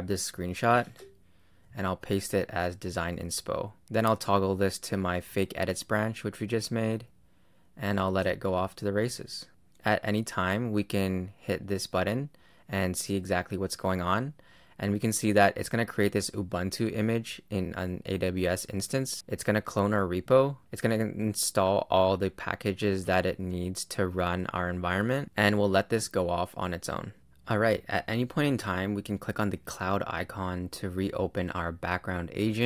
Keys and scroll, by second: 0.7 super+Tab, 1.6 super+v.